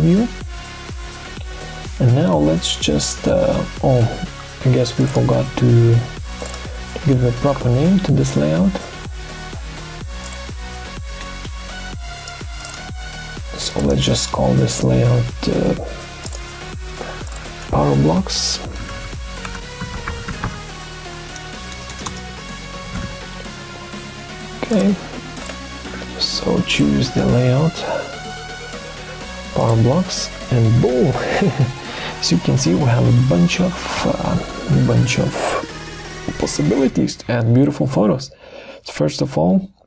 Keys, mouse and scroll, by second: 18.5-23.6 typing.